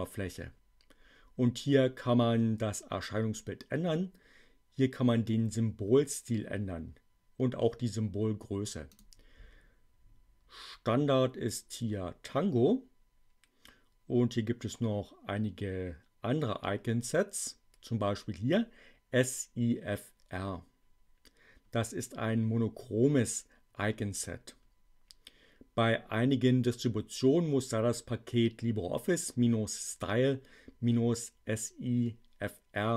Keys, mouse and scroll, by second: 8.9 click.